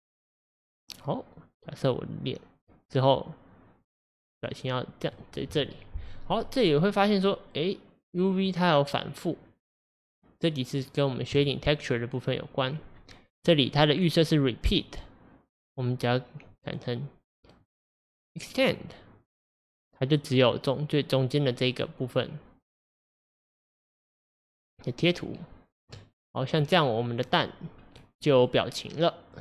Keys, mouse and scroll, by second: 5.2 click, 6.4-11.4 middle drag, 11.4 click, 17.7 click, 19.5 middle click, 20.3-22.5 middle drag, 26.2-26.7 scroll down 3, 26.7-27.8 middle drag, 27.8-28.6 scroll up 3.